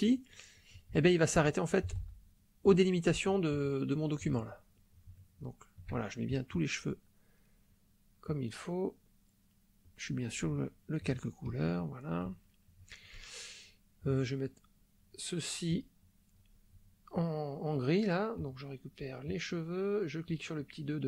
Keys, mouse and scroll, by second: 1.0 shift+middle click, 1.9 ctrl+z, 2.8 shift+middle click, 3.7 shift+middle click, 5.2 shift+middle click, 6.3 shift+click, 8.2 click, 9.0-10.1 drag, 10.6 shift+middle click, 11.5 shift+click, 12.4 shift+middle click, 15.7 click, 18.4 click, 19.4 click, 20.2 click.